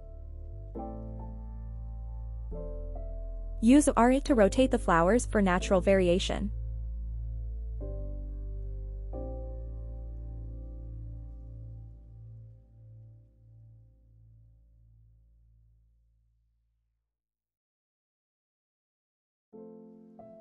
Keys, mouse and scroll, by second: 0.3 click, 0.8-2.7 middle drag, 3.1 middle drag, 3.8-6.6 middle drag, 7.0-7.3 middle drag, 7.6-7.9 middle drag, 8.5 r, 9.0 y, 9.3 y, 13.4 click, 13.8 click, 14.1-15.5 middle drag, 15.8 r, 16.2 y, 16.6 y, 19.8 right click, 20.1-20.4 middle drag.